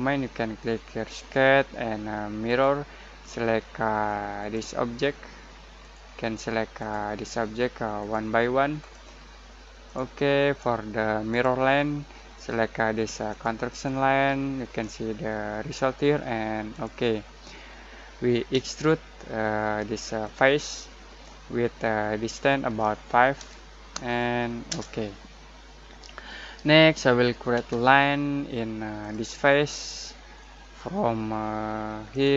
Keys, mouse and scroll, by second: 1.0 Return, 1.0 click, 16.7 click, 18.5 e, 20.2 click, 23.3 5, 24.6 Return, 27.5 l, 29.0 click, 30.3 middle click, 30.5-32.1 middle drag, 32.1 click.